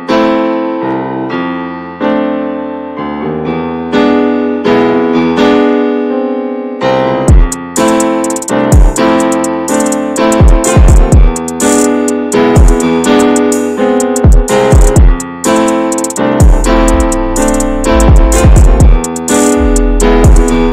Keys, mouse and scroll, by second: 0.0 alt+shift+click, 1.0 x, 1.4 Tab, 1.5 click, 1.7 ctrl+a, 2.2 middle click, 2.6 /, 3.0 /, 3.7-5.1 middle drag, 5.1 click, 5.3 shift+middle drag, 5.5 scroll up 1, 5.8-6.5 middle drag, 6.5 Tab, 7.0 alt+middle click, 7.5-7.8 scroll down 2, 7.8 alt+z, 8.2 shift+middle click, 8.9 1, 9.7 click, 10.4 click, 11.1 alt+z, 11.4 middle click, 11.7 Tab, 11.9 click, 12.2 /, 12.6-13.6 middle drag, 13.6-15.2 drag, 15.2 scroll down 1, 15.4-16.0 middle drag, 16.0-16.7 scroll up 4, 16.2-16.5 shift+middle drag, 16.8 middle click, 17.1 Tab, 17.5 middle click, 18.2 2, 18.3-20.4 drag, 20.4 shift+middle click.